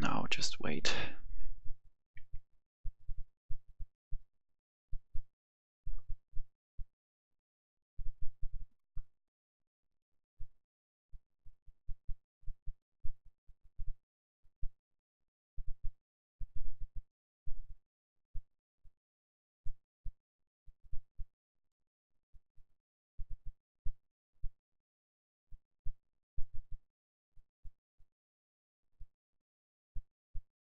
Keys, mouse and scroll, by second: 28.3-28.9 scroll down 1, 28.9 click.